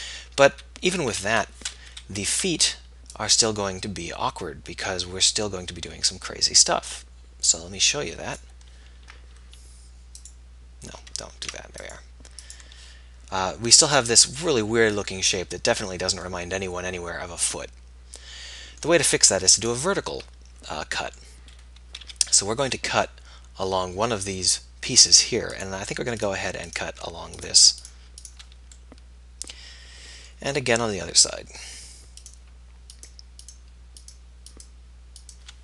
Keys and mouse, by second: 1.3 a, 2.0 KP_1, 2.6 b, 11.4 ctrl+z, 21.6 middle click, 22.1 z, 23.3-24.9 middle drag, 28.9-33.2 middle drag.